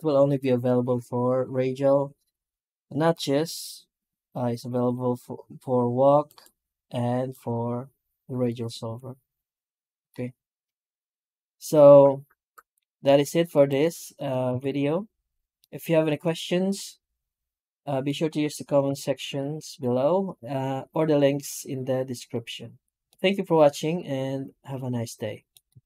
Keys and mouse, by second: 12.9 Tab, 13.4 right click, 13.6 Tab, 13.9 right click, 14.3 x, 15.4-15.9 middle drag, 16.3-17.9 shift+middle drag, 22.9-25.3 middle drag.